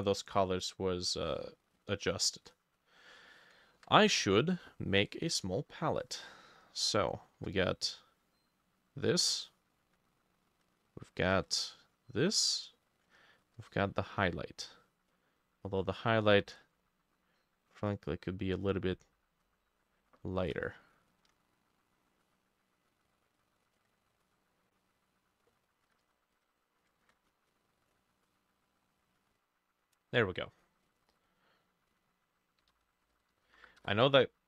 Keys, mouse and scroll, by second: 0.6 double click, 7.0 shift+click, 11.4 ctrl+click, 13.5 ctrl+click, 16.4 ctrl+u, 21.1 ctrl+click, 23.7 ctrl+click, 25.8 ctrl+middle click, 25.9 ctrl+z, 26.1 ctrl+z, 26.4 ctrl+z, 26.9 middle click, 27.0 ctrl+shift+z, 31.0 double click, 31.9 double click, 32.4-34.0 typing, 33.1-34.4 drag.